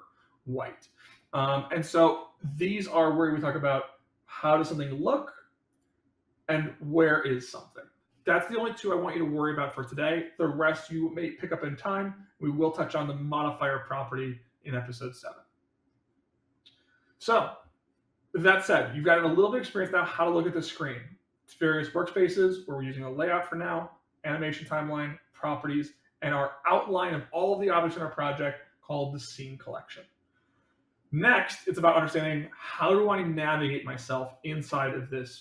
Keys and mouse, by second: 5.7 click.